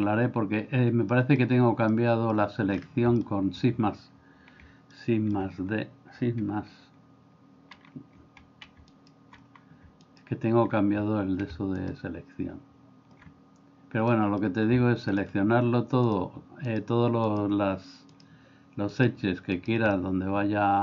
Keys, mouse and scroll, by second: 1.1 middle click, 1.9 middle click, 3.1 shift+middle click, 5.0 shift+middle click, 14.1 middle click, 20.0 middle click.